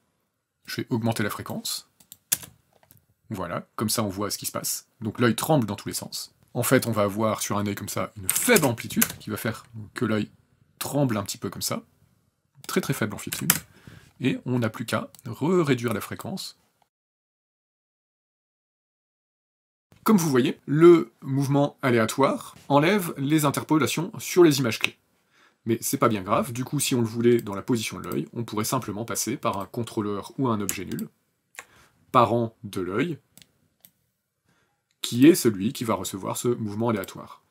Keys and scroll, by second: 2.1 KP_0, 8.0 KP_1, 8.2 KP_0, 8.3 KP_Enter, 8.8 KP_0, 13.0 KP_7, 13.2 KP_Enter, 16.9 KP_Enter, 16.9 KP_2, 19.9 space.